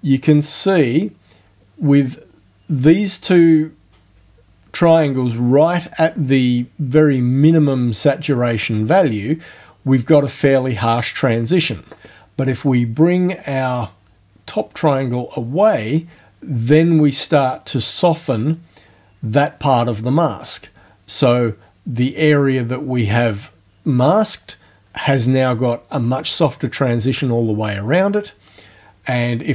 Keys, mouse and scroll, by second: 13.1-16.1 drag.